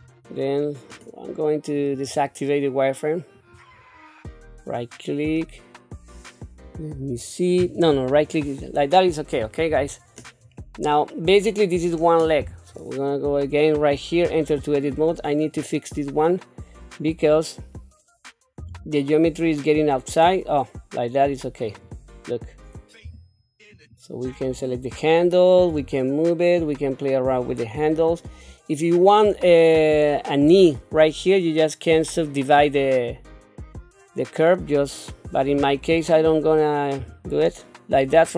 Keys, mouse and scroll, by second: 1.7-3.7 drag, 4.3 right click, 7.8 right click, 9.7 KP_7, 10.6-11.9 middle drag, 12.3 KP_3, 14.2 Tab, 15.1 click, 18.6 g, 23.0 q, 23.7 click, 25.7 g, 37.0 q, 38.2 click.